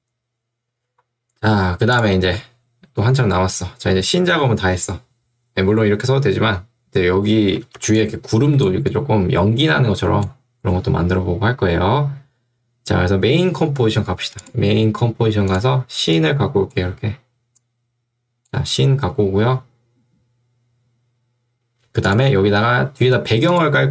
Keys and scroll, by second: 7.8 ctrl+2, 10.8 Escape.